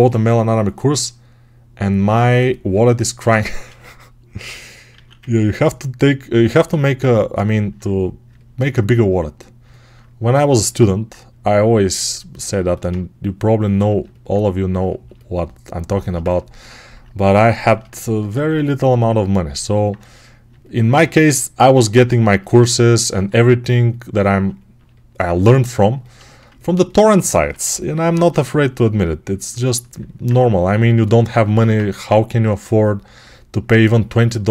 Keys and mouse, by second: 4.8 alt+q, 18.2 alt+q, 20.8 ctrl+z, 27.2 1, 31.2 2.